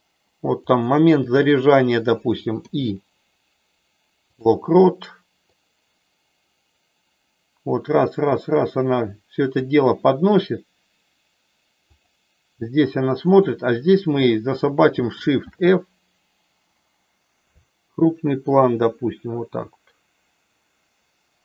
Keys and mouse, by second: 0.6 click, 2.6 i, 5.6-9.6 drag, 12.0 click, 13.3 click, 15.5 shift+f, 17.5 Down.